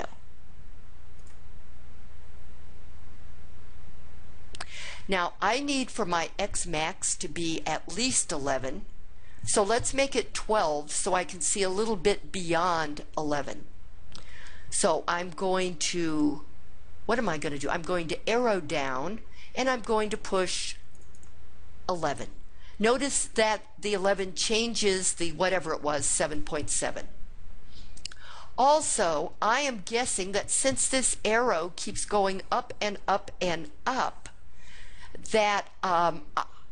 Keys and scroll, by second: 21.0 1, 21.3 1.